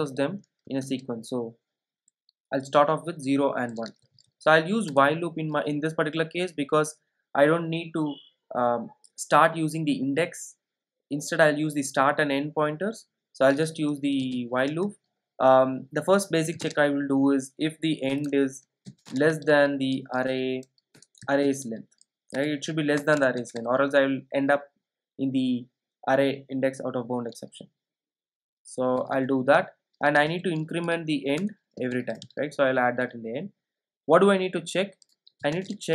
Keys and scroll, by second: 0.9 alt+super+l, 4.9 alt+super+l, 5.3 Return, 21.0 Return.